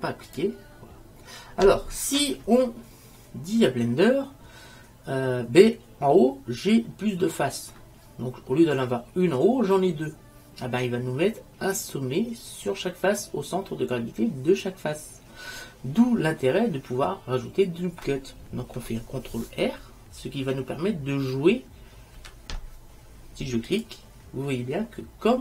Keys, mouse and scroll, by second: 3.3 middle click, 4.5 middle click, 22.3 ctrl+r.